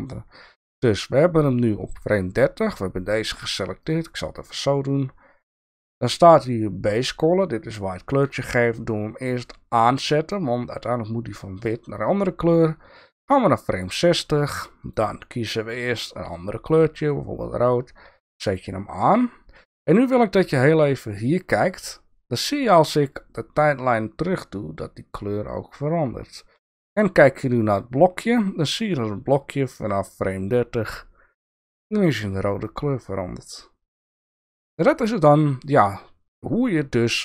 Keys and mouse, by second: 3.8 click, 9.7 click, 12.7-13.8 drag, 14.8 click, 18.2 click, 23.1-26.8 drag, 28.8-35.7 drag.